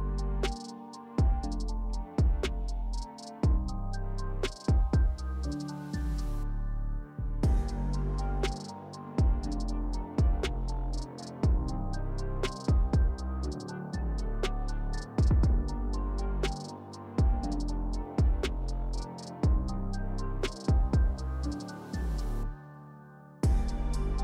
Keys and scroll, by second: 2.1 w, 8.0 3, 12.1 w, 16.0 3, 19.3 s, 21.9 s, 23.2 s.